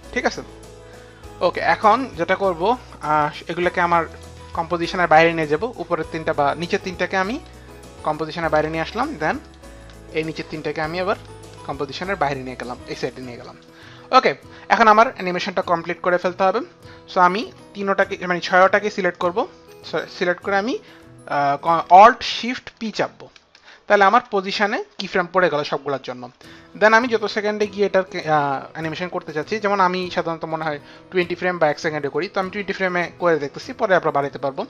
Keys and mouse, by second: 4.1 shift+click, 7.2 shift+click, 9.4 click, 11.2 shift+click, 18.0 click, 22.9 alt+shift+p, 26.8 alt+shift+p.